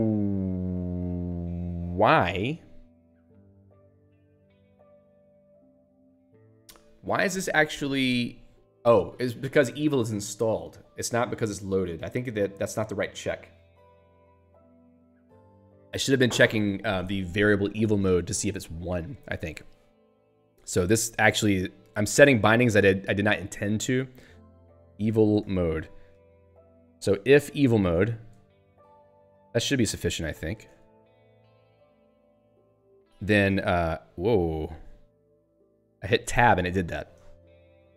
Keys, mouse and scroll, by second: 4.5 click, 21.1 click, 21.5 Down, 21.8 Up, 22.1 Left, 23.7 Right, 24.8-26.1 typing, 26.3 ctrl+g, 26.7 Right, 27.8 End, 27.9-30.0 typing, 31.5 ctrl+g, 32.7 ctrl+s, 32.9 Down, 33.5 Tab, 35.2 ctrl+/.